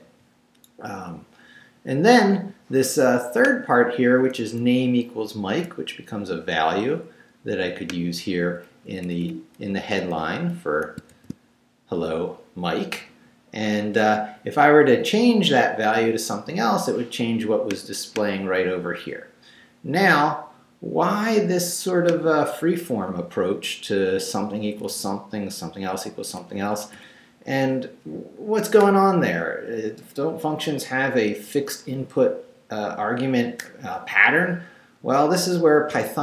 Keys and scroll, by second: 4.2 Right, 8.8 Up, 9.7 Down, 11.0 shift+Down, 11.1 shift+v, 23.1 Left, 24.9 Right, 26.4 Right.